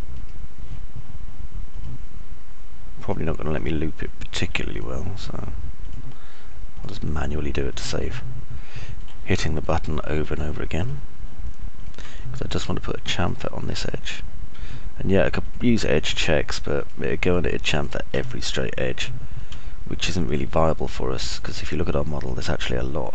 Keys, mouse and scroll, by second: 2.8 ctrl+right click, 4.4 ctrl+right click, 5.8 ctrl+right click, 6.1 ctrl+right click, 7.8 ctrl+right click, 8.8 ctrl+right click, 9.1 alt+click, 9.1-10.1 alt+middle drag, 9.1 alt+right click, 10.3 middle click, 10.6 click, 10.6 right click, 13.3 click, 13.3 middle click, 13.3 right click, 18.8 ctrl+right click, 19.1 click, 19.1 middle click, 19.1 right click.